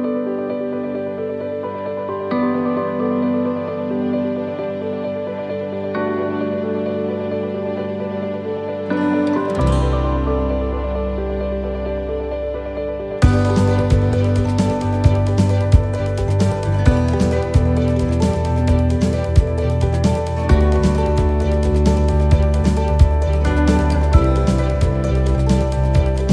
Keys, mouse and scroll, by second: 0.4 l, 1.3 click, 5.9 click, 5.9 right click, 6.8 l, 7.7 x, 10.5 right click, 10.5 l, 12.3 shift+d.